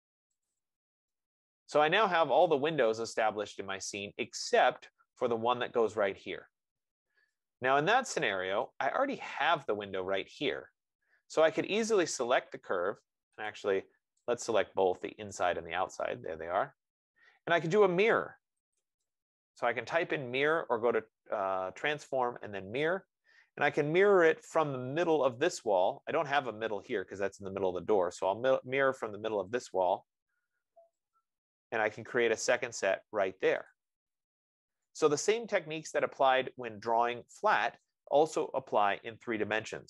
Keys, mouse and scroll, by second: 0.0 click, 0.7 click, 5.0 click, 5.7 right click, 9.0 right click, 10.0 click, 12.6 click, 18.8-20.3 typing, 19.3-21.0 drag, 20.9 Return, 25.6 typing, 26.6 F15, 30.0 click, 31.6 click, 37.6 click, 38.1-39.8 right drag.